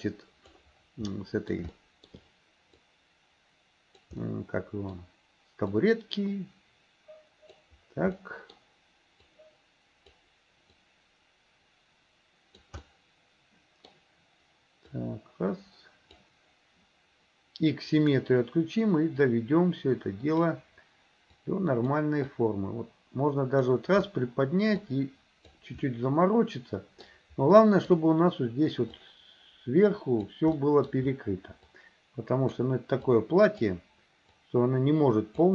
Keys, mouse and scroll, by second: 1.1 middle click, 1.8 shift+middle click, 2.8-4.1 drag, 4.2 middle click, 5.8-7.6 drag, 8.2 middle click, 9.3 click, 10.8-12.7 drag, 12.9-14.0 middle drag, 15.0-16.3 drag, 18.0 click, 19.3-20.5 drag, 21.5 click, 22.3-23.7 drag, 24.9 click, 25.9-27.1 middle drag, 27.6 middle click, 29.0-30.4 drag, 30.6 middle click, 31.8 click, 33.1 click, 34.4-35.5 drag.